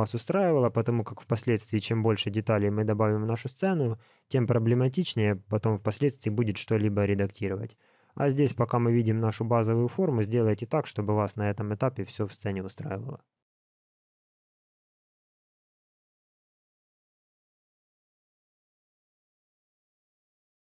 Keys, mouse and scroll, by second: 7.9 middle click, 12.4 middle click.